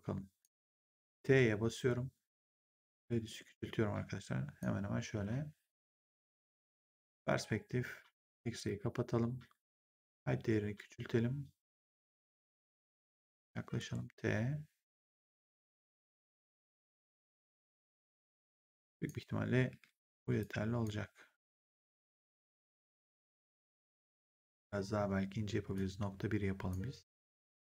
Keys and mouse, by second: 2.6 click, 6.3 right click, 6.8 click, 8.5 click, 10.0 click, 12.3 w, 13.0 click, 13.7 t, 15.1 click, 19.6 w, 20.3 click, 21.4 click, 25.6 click, 27.1 click, 27.4 w.